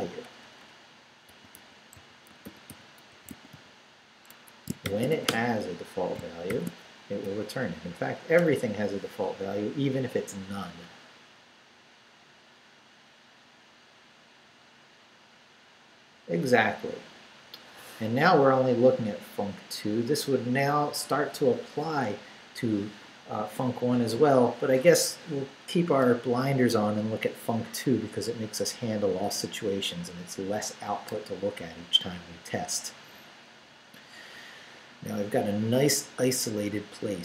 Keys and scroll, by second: 1.0-5.1 typing, 4.3 Escape, 5.3 Return, 6.2 shift+Return, 6.5 shift+;, 6.9 shift+Up, 8.4 Return.